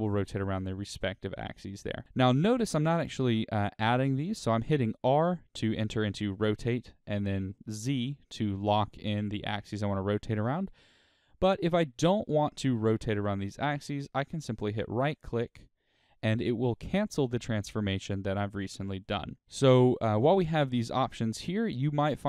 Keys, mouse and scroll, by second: 0.6 right click, 0.8 click, 3.9 r, 15.4 right click, 17.1-19.4 middle drag, 17.9-18.3 scroll down 2, 19.4 scroll up 1.